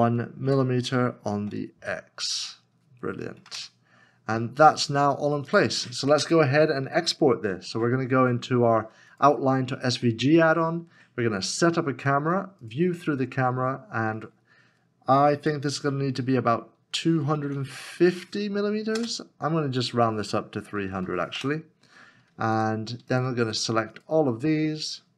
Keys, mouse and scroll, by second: 0.4 1, 1.4 x, 3.4 x, 3.5 Return, 4.3 scroll down 1, 16.4 KP_2, 17.4 KP_5, 18.9 Return, 20.9 KP_0, 21.0 KP_0, 21.3 Return, 24.8 shift+click.